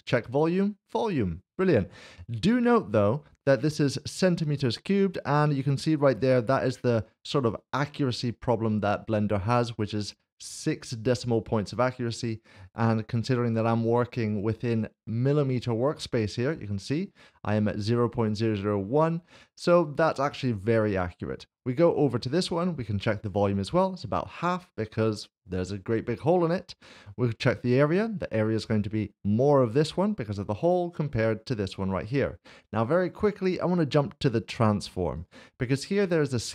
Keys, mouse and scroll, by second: 16.4 click, 19.3 click, 21.6 click, 24.5 middle click, 27.5 click, 28.7 middle click, 35.2 click.